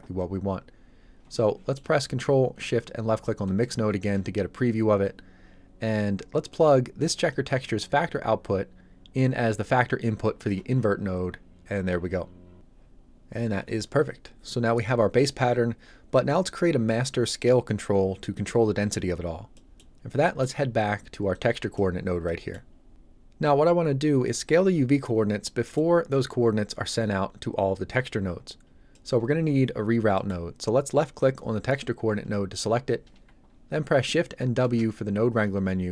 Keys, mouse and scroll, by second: 1.4 middle click, 3.5 ctrl+shift+click, 7.3 shift+click, 7.4 click, 18.9 scroll down 1, 19.5 middle click, 20.0 scroll down 1, 20.2 middle click, 20.7 scroll up 1, 21.3 click, 21.9 scroll up 1, 22.3 middle click, 22.7 scroll up 1, 25.6 middle click, 25.9-28.6 scroll down 1, 28.6-28.9 scroll up 1, 28.9 middle click, 29.8 scroll up 1, 30.2 middle click, 31.2 click, 34.6 shift+w.